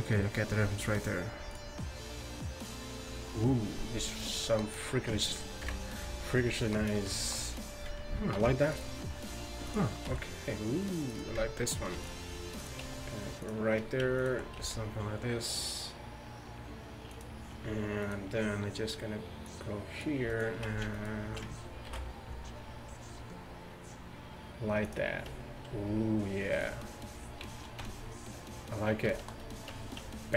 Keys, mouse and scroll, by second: 5.7 KP_1, 8.4 ctrl+r, 10.1 s, 12.0 ctrl+r, 12.9 s, 14.2-16.9 right drag, 14.6 s, 18.1-20.1 right drag, 19.5-21.9 drag, 20.3-21.9 right drag, 21.9 ctrl+b, 27.9 Tab, 29.8 Tab.